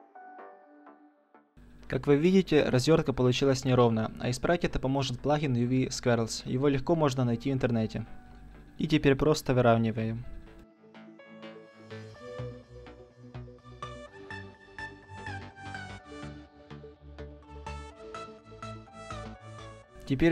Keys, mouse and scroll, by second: 0.6 u, 4.4-10.9 drag, 10.8 g, 11.1 click, 13.5 click, 13.9 s, 14.9-15.3 drag, 15.0 s, 16.1-17.3 middle drag, 17.3-18.5 drag, 18.5-20.3 middle drag, 18.5 a.